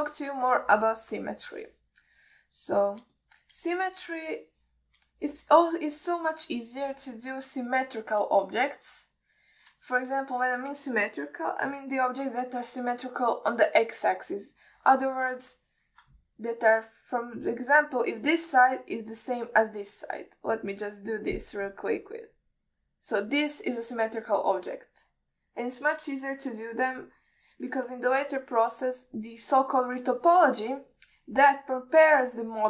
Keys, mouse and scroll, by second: 0.2 alt+shift+middle click, 0.8 ctrl+alt+middle click, 1.2 shift+middle click, 1.8 ctrl+alt+middle click, 2.2 middle click, 2.7 click, 3.4 click, 3.9 click, 4.5 shift+middle drag, 5.0 click, 5.7 click, 6.5 alt+shift+middle click, 7.5 click, 8.2 click, 8.8 alt+middle click, 9.7 alt+shift+middle click, 10.5 click, 11.2 ctrl+alt+middle click, 11.8 alt+middle click, 13.0 KP_1, 17.0 ctrl+alt+middle drag, 22.0-24.6 drag, 30.3 ctrl+alt+middle click, 31.5 ctrl+middle click, 32.2 alt+middle click.